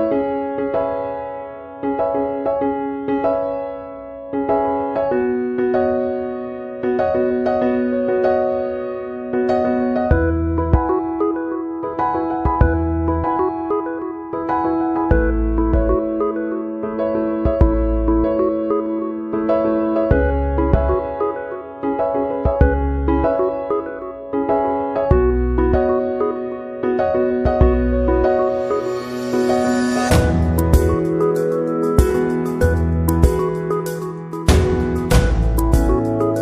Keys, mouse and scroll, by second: 1.6 space, 1.7 click, 2.1 space, 4.1 typing, 8.0 click, 10.5 click, 10.5 typing, 12.7 click, 17.2 click, 20.0 click, 22.7 typing, 22.9 click, 24.8 click, 26.7 click, 28.8 click.